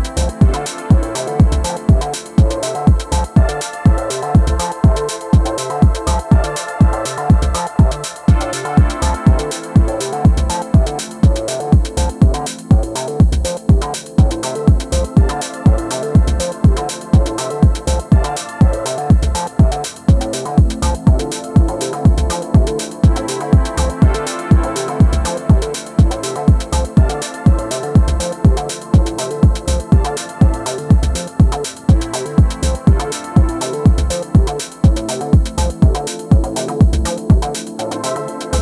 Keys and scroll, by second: 0.0-1.8 typing, 3.6 space, 16.6 space, 17.3 space, 18.2 space, 26.7 space.